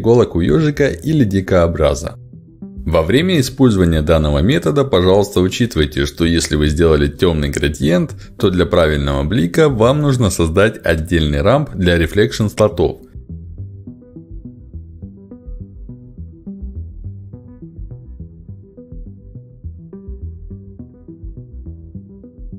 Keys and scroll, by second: 13.2 ctrl+c, 13.4 ctrl+v, 21.0 ctrl+c, 21.2 ctrl+v.